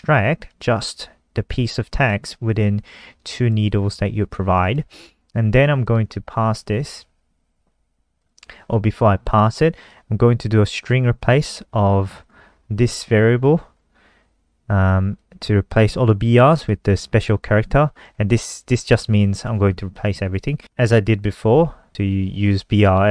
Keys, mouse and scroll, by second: 0.7 click, 5.4 scroll down 3, 6.0 click, 6.6 Return, 6.7 Return, 6.8 Return, 7.0 Return, 7.1 Return, 7.3 Return, 8.4 click, 8.8-10.1 scroll down 1, 10.1 click, 12.8-13.7 scroll up 3, 13.9-15.4 scroll down 4, 15.4 click.